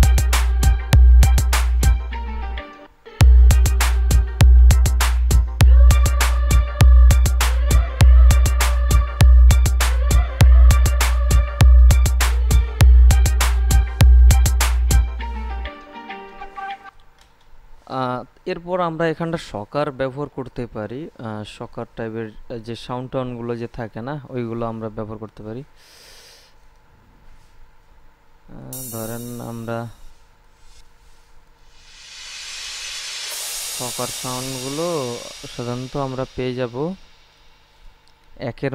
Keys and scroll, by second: 3.0 space, 17.0 space.